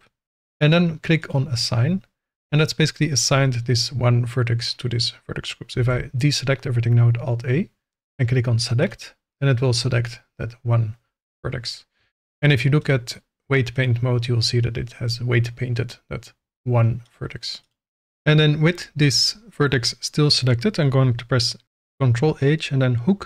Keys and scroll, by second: 7.0 alt+a, 12.0 Tab, 21.6 ctrl+h.